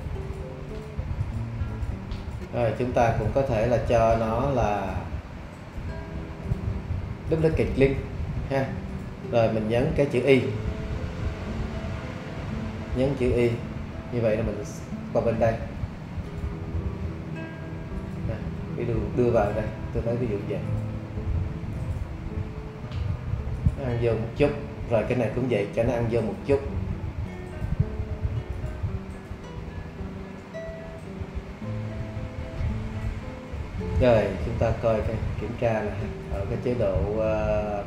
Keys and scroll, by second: 13.5 shift+y, 34.7 shift+`.